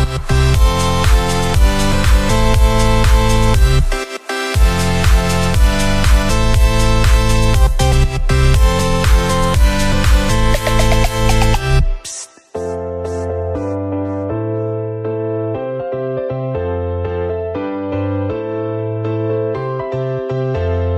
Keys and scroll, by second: 11.6 ctrl+0, 11.8 ctrl+=, 16.5 ctrl+z, 19.7 ctrl+z.